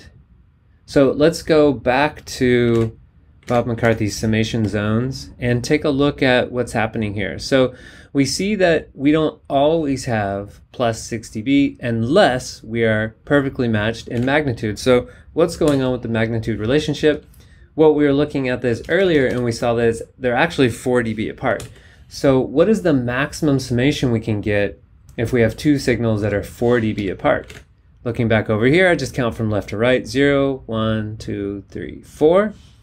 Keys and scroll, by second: 2.8 super+Tab, 14.1 super+Tab, 15.6 super+y, 17.1 z, 18.8 super+Down, 21.7 super+y, 26.2 z, 27.4 super+z, 27.6 super+Tab.